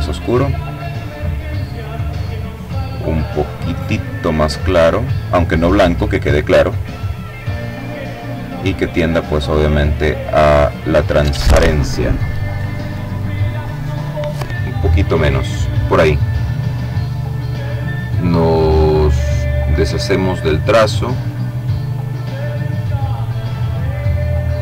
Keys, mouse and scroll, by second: 1.9-4.5 drag, 5.1-6.4 drag, 7.1-8.5 drag, 8.5-9.6 drag, 12.7-14.0 drag, 14.9-16.2 middle drag, 17.6 click, 20.4 click.